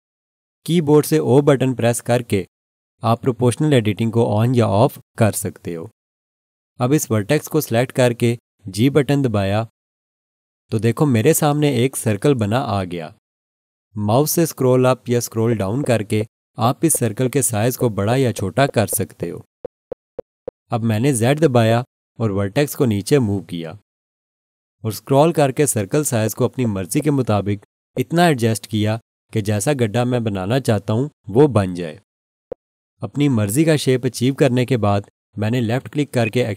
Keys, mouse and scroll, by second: 2.1 o, 9.5 g, 15.3-15.7 scroll down 1, 17.6-18.2 scroll down 1, 18.2-18.5 scroll down 1, 18.7 scroll down 1, 19.4 scroll down 1, 20.0 scroll down 1, 21.5-22.6 scroll down 1, 22.6 scroll down 1, 22.6 z, 26.1-26.8 scroll down 1, 30.9-32.3 scroll up 1, 32.3-35.3 scroll down 1, 36.2 click.